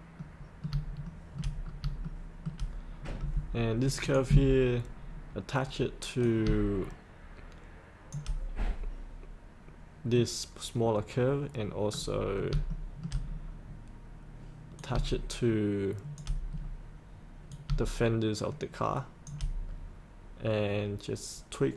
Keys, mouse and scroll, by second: 0.3 middle click, 1.0 shift+middle click, 1.6 scroll up 1, 2.0 shift+middle click, 2.9-4.0 scroll down 1, 4.0 click, 5.0 scroll down 1, 6.2-8.1 drag, 11.8-12.2 scroll down 1, 12.7 shift+middle click, 13.2 scroll down 1, 14.8 click, 16.5 scroll down 1, 17.5-19.2 drag.